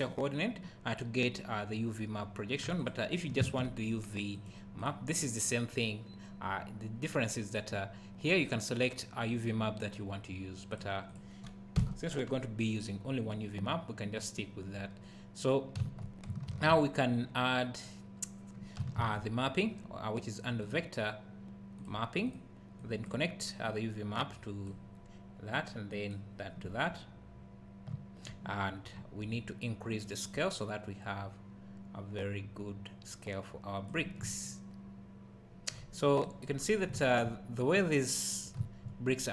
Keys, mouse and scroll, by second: 11.1 click, 11.8 Delete, 22.8 click, 23.6-39.3 drag, 27.9 `, 34.2 `, 36.5-36.9 scroll up 1, 36.9 `.